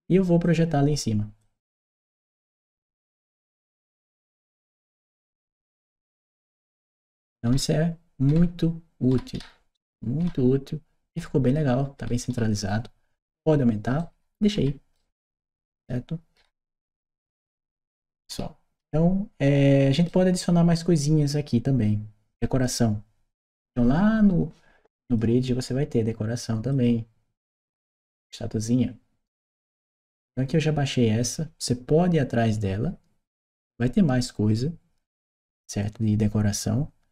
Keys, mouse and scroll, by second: 0.2 click, 1.2 click, 2.9 click, 4.7-14.7 right drag, 5.3 w, 7.3 d, 8.1 a, 10.0 s, 11.0 w, 11.8 s, 15.0 click, 15.4-19.8 right drag, 24.8 click, 26.5 click, 29.3 click.